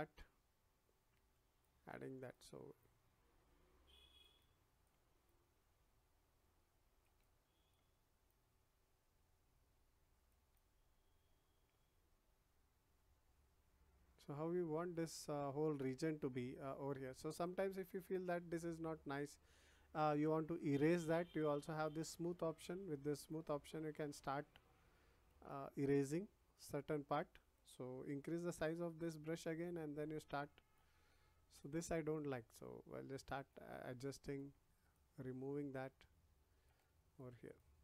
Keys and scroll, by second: 28.2 ].